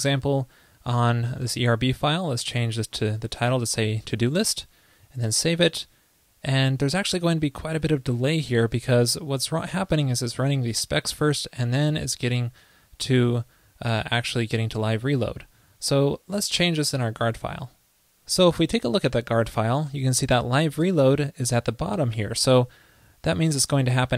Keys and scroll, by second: 4.2 super+s, 23.3 super+x.